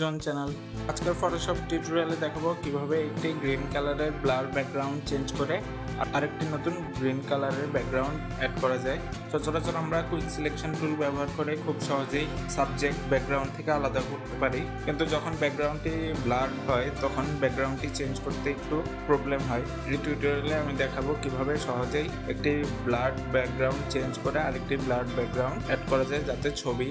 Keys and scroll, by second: 0.1 ctrl+=, 3.2 ctrl+=, 3.5 ctrl+-, 17.8 ctrl+-, 18.3 ctrl+t, 23.1 ctrl+0.